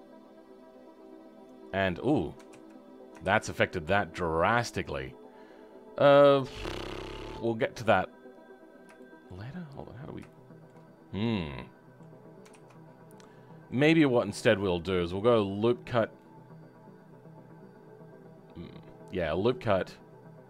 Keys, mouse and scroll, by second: 2.4 ctrl+z, 3.1 ctrl+shift+z, 3.6-9.4 middle drag, 9.4-10.2 scroll up 3, 10.2 shift+middle click, 10.8-11.1 scroll down 2, 11.1-12.4 middle drag, 12.4 ctrl+z, 12.7-13.1 scroll down 3, 13.1-16.2 middle drag, 16.2-19.1 right drag.